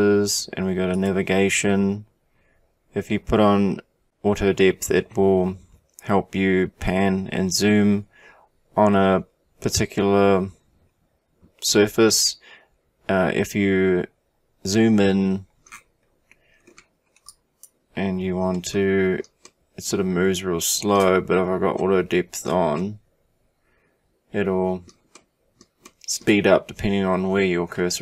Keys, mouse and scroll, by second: 15.7-16.5 scroll up 1, 16.5-17.3 scroll up 9, 17.3 click, 18.6-28.0 shift+middle drag.